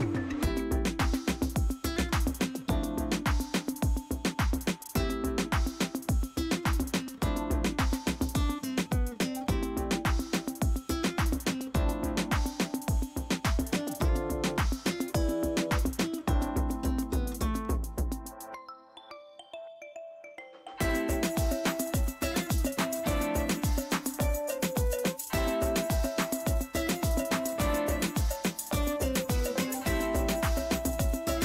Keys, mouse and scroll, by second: 0.0 click, 12.2 space, 12.3 right click, 12.8 click, 13.5 space, 13.8-16.5 ctrl+drag, 16.5 ctrl+m, 18.3 click, 18.3 click, 18.9 Return, 21.0-23.6 drag, 24.1-25.4 scroll up 1, 25.4 click, 25.8-26.8 scroll up 1, 27.9 Return.